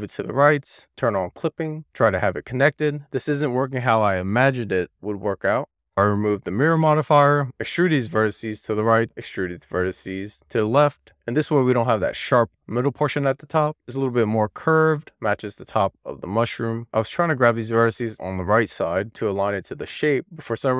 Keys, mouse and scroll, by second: 1.3 click, 2.1 click, 2.9 super+z, 3.6 click, 3.9 super+z, 4.1 super+z, 4.7 super+z, 5.0 super+z, 7.0 click, 7.6 6, 8.3 click, 9.0 click, 9.6 alt+z, 10.3 d, 10.8 ., 11.0 click, 16.5 alt+z, 16.9 click, 18.0 click, 19.9 super+z, 20.4 alt+z.